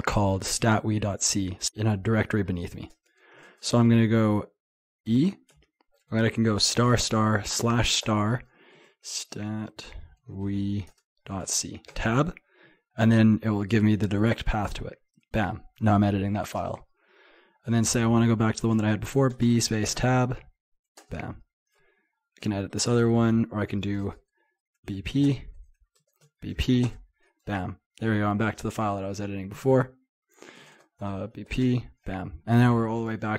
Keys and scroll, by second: 3.5 typing, 14.7 Return, 18.8 typing, 30.7-31.9 typing.